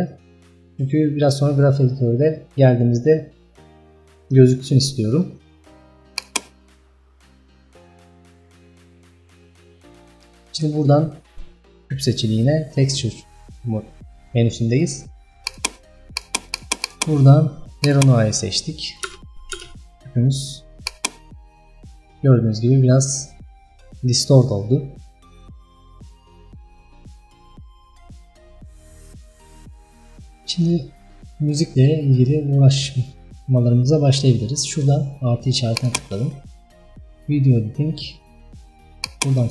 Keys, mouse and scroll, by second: 16.6 click, 18.0-19.1 drag, 19.1 space, 19.6 space, 20.9-39.5 drag.